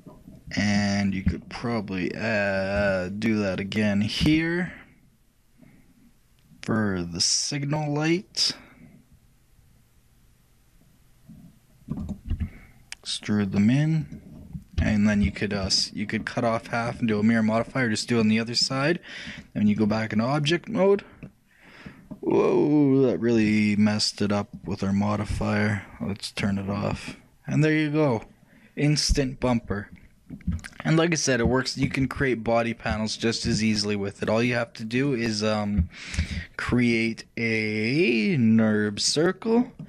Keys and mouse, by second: 2.0 middle click, 2.2 middle click, 2.4 middle click, 2.8-4.4 shift+middle drag, 4.4 shift+c, 14.4 middle click, 14.9 a, 15.5 shift+middle click, 18.6-20.6 middle drag, 19.4-21.0 drag, 21.0-24.4 middle drag, 24.6-26.4 drag, 26.5 click, 27.2-29.0 middle drag, 30.7-35.1 shift+middle drag, 35.1-36.8 shift+drag, 36.3 shift+a, 39.6 middle click.